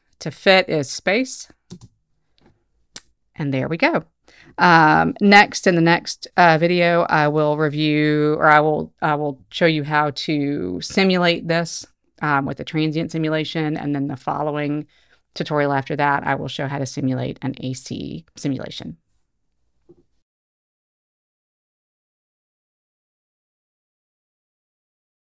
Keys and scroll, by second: 1.8 space.